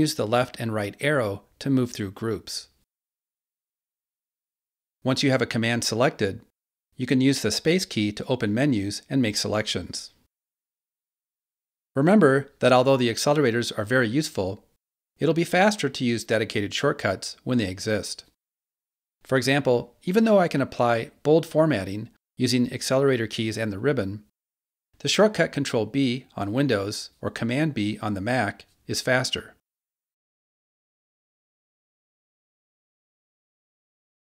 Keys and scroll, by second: 0.0 ctrl+Right, 5.6 ctrl+Left, 7.1 Right, 9.5 super+space, 20.0 alt+h, 20.8 1, 24.0 alt+h, 24.8 1, 27.2 ctrl+b, 33.5 Return.